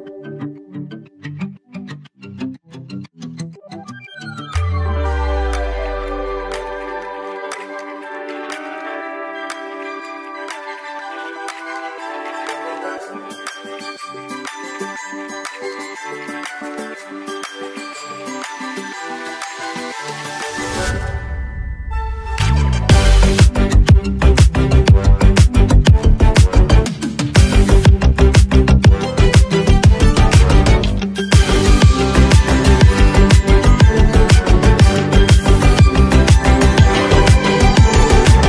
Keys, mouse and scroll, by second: 4.9 click, 6.0 ctrl+s, 10.6-18.8 drag, 16.6 ctrl+Num_Lock, 21.5 click, 25.4-29.2 drag, 32.6 x, 33.1-34.6 drag, 34.6-35.7 typing, 36.1-38.4 drag.